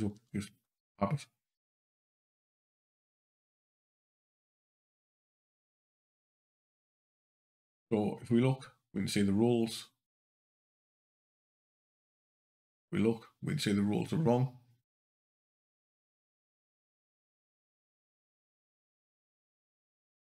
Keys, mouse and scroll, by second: 0.0 q, 1.8 g, 5.5 click, 10.1 click, 11.8 click, 15.4 scroll up 2, 15.9 scroll down 2, 19.8 click.